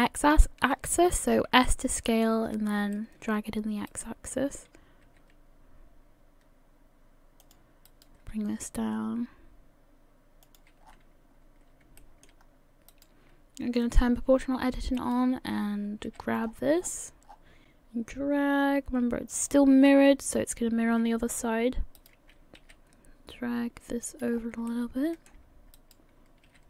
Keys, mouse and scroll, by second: 0.2-0.8 scroll up 2, 0.2 s, 1.4-1.8 scroll up 1, 1.9 shift+middle click, 2.4-2.8 scroll up 3, 2.9 shift+middle click, 3.9 right click, 5.1 g, 7.4 g, 7.9 click, 8.6 right click, 8.9 g, 10.9-11.7 scroll down 9, 12.0 shift+middle click, 12.4-12.9 scroll up 1, 12.9 right click, 13.8 click, 14.5-14.9 scroll up 2, 15.0 right click, 16.1 r, 19.8-20.6 scroll down 5, 21.1 scroll up 4, 22.0 right click, 22.6 g, 24.4 scroll up 1, 24.7 shift+middle click, 25.8 right click, 26.5 g.